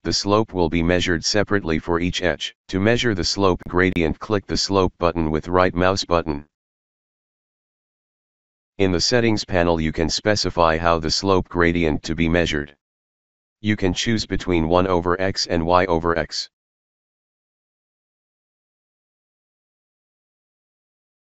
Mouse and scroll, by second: 1.2 ctrl+click, 5.0 right click, 10.0 click, 11.8-13.6 drag, 17.5 click, 20.7 click.